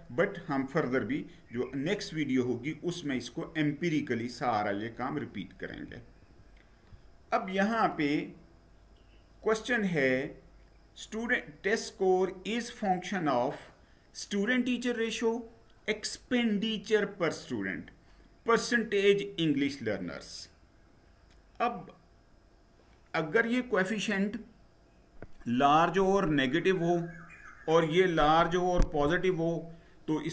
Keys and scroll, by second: 5.7 Down.